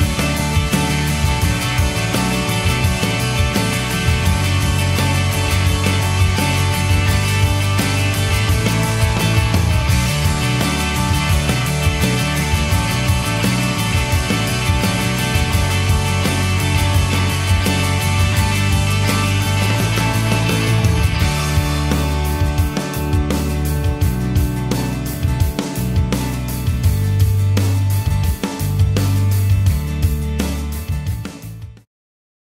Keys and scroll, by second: 15.4 t, 17.4 super+t, 20.7 =, 30.9 0, 31.6 -.